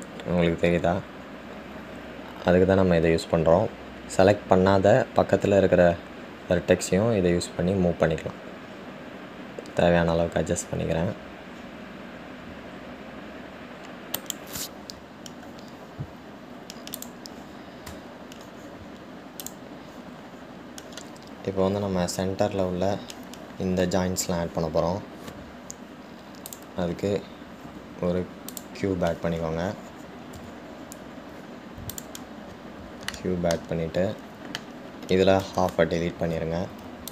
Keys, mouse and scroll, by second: 18.2 click, 20.6-23.7 drag, 27.7-30.7 drag, 33.8-34.3 scroll up 2, 34.3-35.0 shift+middle drag, 35.0 scroll down 1, 35.1-35.8 scroll up 1, 35.8-36.7 scroll down 1, 36.7 Tab.